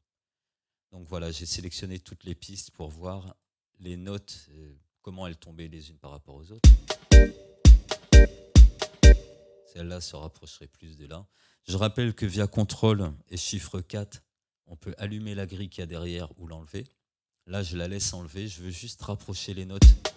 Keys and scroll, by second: 6.6 space, 14.1 ctrl+4, 16.9 ctrl+4, 19.8 space.